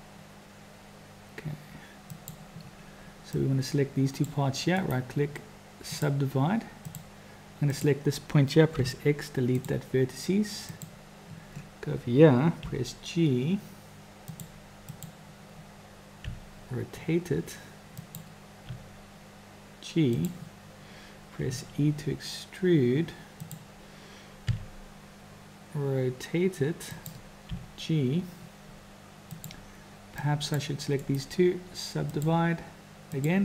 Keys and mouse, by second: 3.3 click, 4.8-6.1 drag, 6.8 click, 7.6 click, 8.8 x, 10.6 click, 12.7 g, 15.1 click, 16.2 r, 18.7 g, 21.5 e, 24.5 r, 30.4 click, 31.0-33.3 drag.